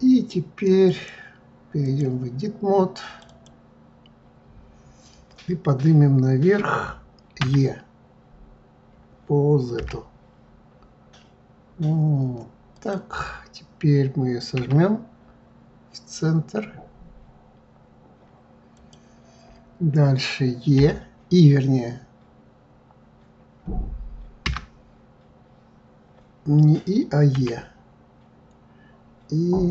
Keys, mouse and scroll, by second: 0.8-3.2 drag, 3.2 click, 7.4 e, 14.6 s, 27.3 e.